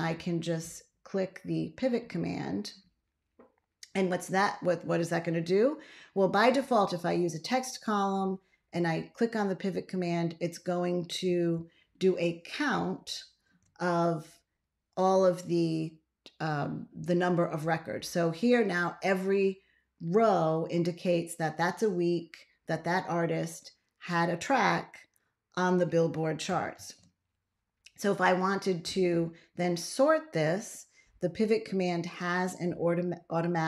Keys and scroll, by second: 11.4 ctrl+a, 26.6 ctrl+x.